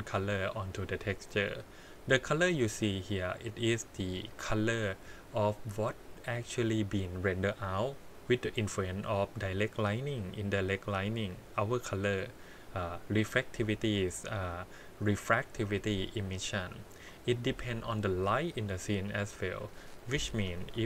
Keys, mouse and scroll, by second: 0.1-0.7 scroll up 3, 0.7-1.0 scroll down 1, 1.0 middle click, 19.5 click, 20.0-20.4 scroll down 3.